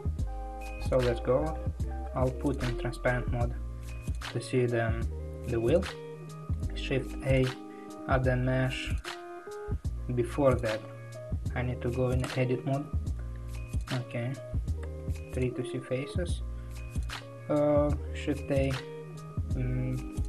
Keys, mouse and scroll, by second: 2.5 alt+z, 12.2 Tab, 15.1 3.